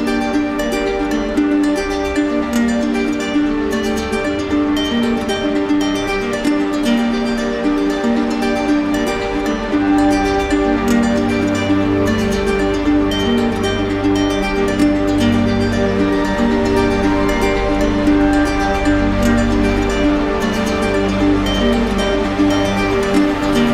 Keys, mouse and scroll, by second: 0.7 click, 1.7 shift+click, 4.4 right click, 6.1 click, 6.2 ctrl+z, 12.8 click, 13.0 middle click, 17.5 click, 18.1 ctrl+z, 20.6 click, 20.7 ctrl+z, 22.8 click, 23.0 ctrl+z.